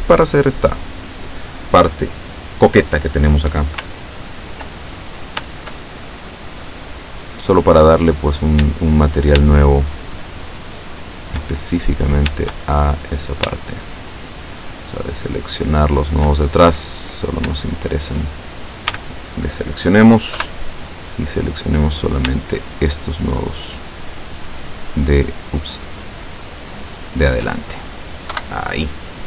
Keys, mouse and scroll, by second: 5.9-7.2 shift+scroll up 2, 7.2 scroll down 1, 9.6 shift+right click, 10.1 shift+right click, 11.0 shift+right click, 11.6 shift+middle click, 12.8 shift+middle click, 14.0 shift+right click, 14.5 shift+right click, 15.5 shift+right click, 16.0 shift+right click, 16.5 shift+middle click, 17.9 shift+right click, 19.0 a, 20.5 KP_7, 21.8 middle click, 22.7 shift+right click, 23.4 shift+middle click, 23.4 shift+right click, 24.5 shift+right click, 25.5 shift+middle click, 25.5 shift+right click, 26.0 shift+middle click, 26.0 shift+right click, 27.1 shift+right click, 28.4 KP_7.